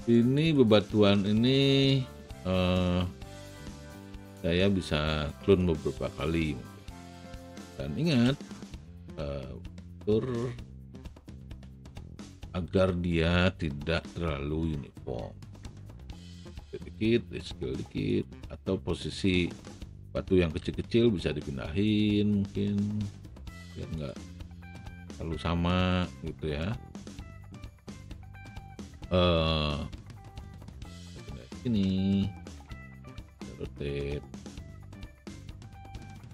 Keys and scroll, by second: 4.0 w, 8.2 shift+r, 12.6 r, 20.8 w, 32.5 e.